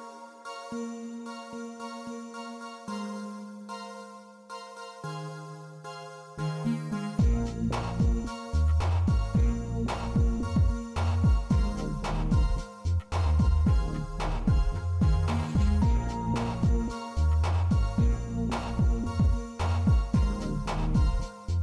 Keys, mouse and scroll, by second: 6.5 a, 7.0 a, 7.7 shift+click, 7.9 shift+middle click, 8.4 shift+click, 8.5 shift+middle click, 10.4 ctrl+middle click, 13.9-14.3 ctrl+middle drag, 14.4-15.0 middle drag, 15.3-16.3 shift+middle drag, 16.3 shift+click.